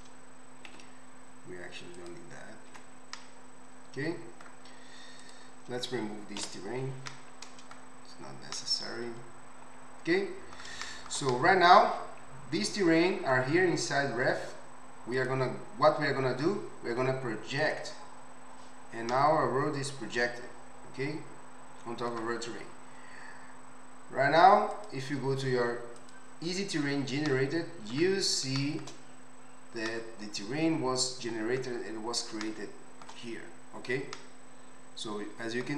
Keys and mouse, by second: 0.7 x, 2.8 Tab, 5.3-15.1 middle drag, 6.5 Delete, 15.1 click, 15.3-17.6 middle drag, 17.6-24.9 drag, 24.9-26.3 middle drag, 26.3 click, 26.4-35.7 middle drag.